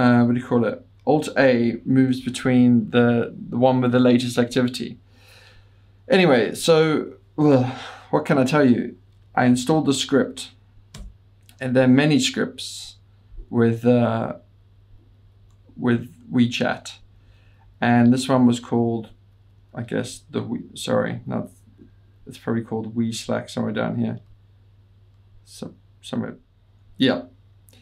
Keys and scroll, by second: 1.7 alt+a, 2.2 alt+a, 2.4 alt+a, 11.1 Return, 11.1 typing, 14.5 Down, 14.7 Down, 14.9 Down, 15.1 Down, 15.3 Down, 15.6 Down, 15.7-16.8 Up, 17.1 Down, 17.3 Down, 17.5 Down, 17.7 Down, 17.8 Down, 18.9 Page_Down, 19.1 Page_Down, 19.4 Page_Down, 19.6 Page_Down, 19.8 Page_Down, 20.0 Page_Down, 20.1-21.5 Page_Down, 21.9 Up, 22.5 Up, 22.6-23.5 Up, 25.5 Up.